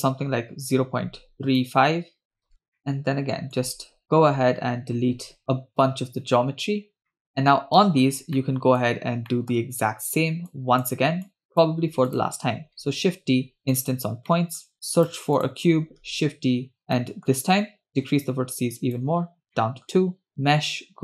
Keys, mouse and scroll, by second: 2.2 shift+click, 2.5 middle click, 2.5 scroll down 2, 2.7 middle click, 3.6-6.2 drag, 7.0 scroll down 2, 7.1 middle drag, 7.3 scroll up 3, 8.2 scroll down 1, 8.4 middle click, 9.3 middle click, 10.5-10.9 drag, 11.2-11.7 drag, 12.1 click, 13.1 shift+d, 14.3 middle click, 14.7 scroll down 1, 15.0 click, 15.4 click, 16.0 shift+d, 16.8 scroll up 2, 17.0 middle click, 17.4-17.8 scroll up 2, 17.9-19.0 shift+drag, 19.5-19.9 middle drag, 20.3-21.0 drag.